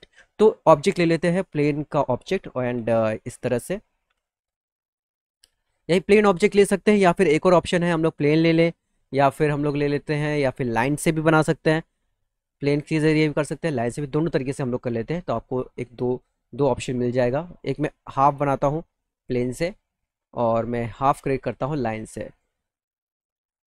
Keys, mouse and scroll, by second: 0.4 click, 1.5 click, 2.6 f, 4.4 middle click, 4.8 middle click, 5.1 middle click, 5.6 middle click, 6.0 middle click, 10.4 click, 11.2 click, 13.9 click, 15.1 click, 15.7 middle click, 16.4 middle click, 17.5-19.5 drag, 19.9 middle click, 20.2 middle click, 20.5 middle click, 22.2 click, 23.0 click.